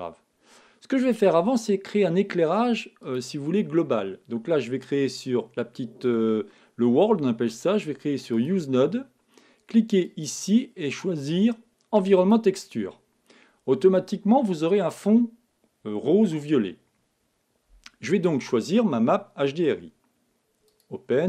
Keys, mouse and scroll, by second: 1.0-1.5 scroll up 1, 1.5 middle click, 3.5-5.2 drag, 8.7-11.8 drag.